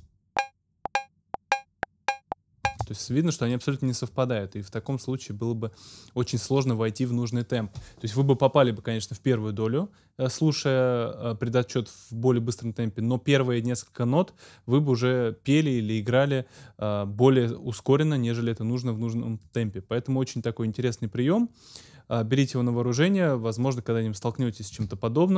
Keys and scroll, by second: 2.7 space.